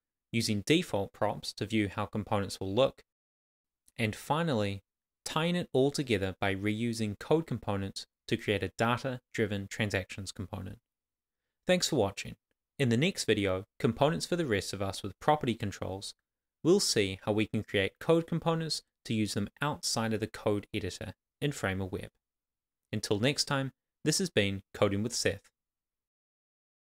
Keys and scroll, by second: 0.9 super+s, 3.5 Left, 3.6 super+s, 4.2 Right, 4.7-8.9 typing, 6.5 Return, 9.3 Return, 9.7 Tab, 10.0 shift+[, 10.1 shift+], 10.1 Left, 11.0 Down, 11.1 Tab, 11.3 Right, 11.5 Return, 11.8 shift+[, 11.9 shift+], 11.9 Left, 12.2 Return, 16.7 Return, 19.4 shift+r, 21.2 Tab.